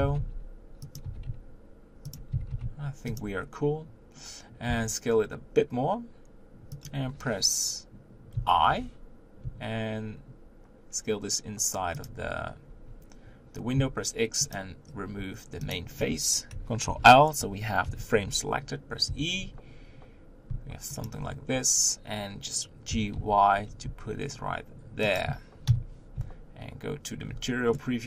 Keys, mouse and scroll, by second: 0.0 s, 1.0 g, 3.5-4.7 scroll up 1, 4.7 s, 8.3 i, 14.5 x, 15.7 click, 16.8 ctrl+l, 17.8 KP_7, 19.0 e, 21.2 Tab, 25.7 KP_1, 27.3 z, 27.7-28.0 middle drag.